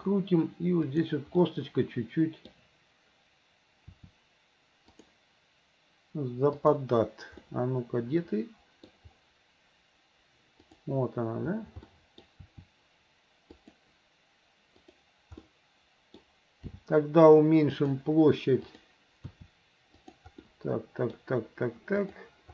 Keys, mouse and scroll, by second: 1.0 click, 1.5-2.5 middle drag, 3.9 r, 6.7 click, 7.5-8.7 middle drag, 8.8 middle click, 10.7 click, 11.9 middle click, 12.5 r, 15.5 middle click, 16.7 g, 18.7 click, 19.3 r, 20.5 middle click, 22.0 click.